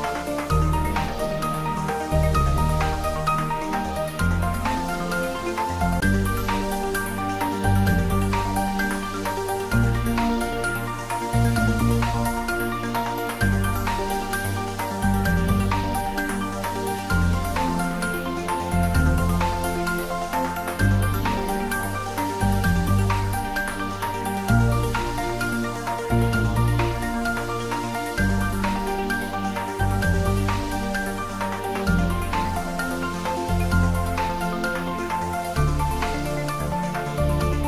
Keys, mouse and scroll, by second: 0.2 y, 3.7 click, 4.1 middle click, 5.0 scroll down 1, 5.5 middle click, 6.6 click, 7.5 3, 7.8 click, 15.5 click, 15.9 ctrl+z, 21.9 ctrl+r, 23.3 scroll up 1, 23.9-24.4 scroll down 1, 24.4-25.7 scroll up 1, 25.7 click, 26.3-27.5 typing, 30.6 click, 32.8 3, 33.0 click, 33.4 middle click, 34.2-35.8 scroll up 1, 36.9 i.